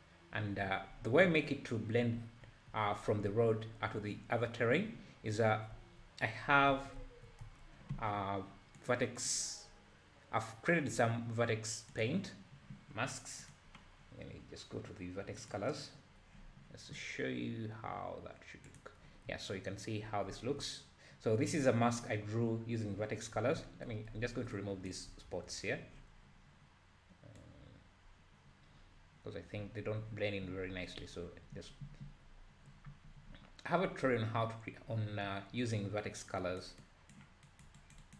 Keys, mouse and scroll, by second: 1.0 `, 2.4 `, 5.7 Tab, 6.7 alt+a, 7.0 `, 7.4 Tab, 8.8 click, 9.2-12.2 drag, 13.4 click, 14.7-15.0 scroll down 3, 15.4-18.4 drag, 18.7 click, 19.3 `, 20.3 `, 24.5-30.4 ctrl+drag, 36.8-38.1 drag.